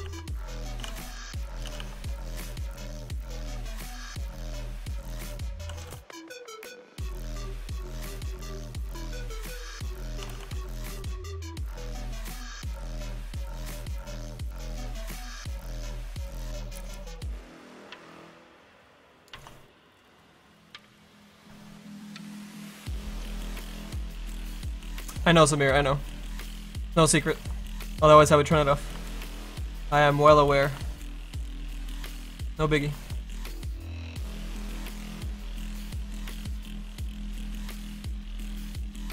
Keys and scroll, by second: 0.0-2.3 typing, 2.4 Return, 5.3-6.2 typing, 7.9 i, 8.3 y, 8.7 BackSpace, 9.7-11.1 typing, 13.1-14.9 typing, 15.1 Return, 38.5 s.